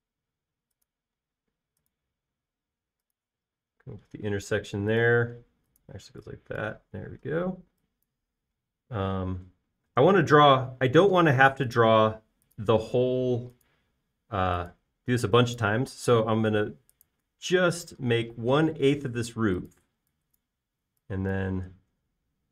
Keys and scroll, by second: 2.2 l, 4.5-5.0 typing, 6.9 typing, 9.6 l, 13.9 l, 15.9-16.9 typing, 21.1 e.